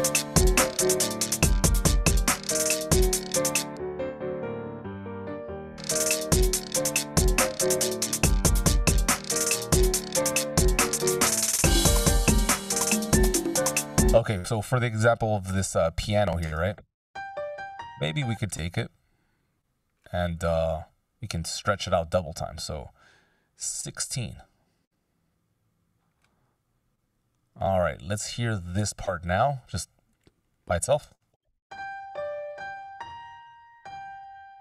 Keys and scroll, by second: 13.5 space, 16.6 space, 31.2 shift+space.